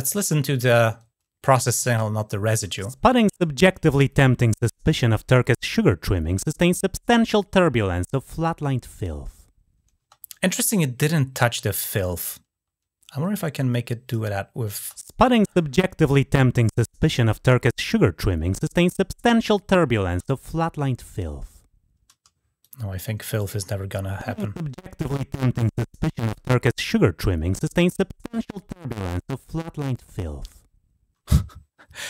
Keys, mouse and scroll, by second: 13.1-13.9 drag, 22.4-23.2 drag, 25.8-26.7 drag, 27.5 click.